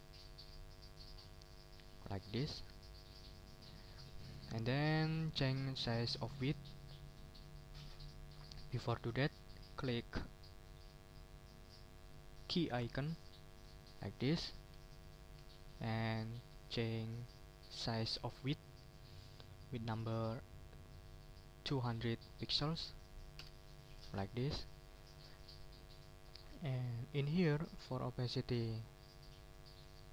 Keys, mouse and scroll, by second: 3.4 ctrl+click, 3.7 ctrl+scroll down 2, 4.2 ctrl+click, 13.7 click, 14.6 click, 15.3 ctrl+a, 21.4-22.3 typing, 23.4 Return, 24.5 click, 26.5 click, 29.0 click.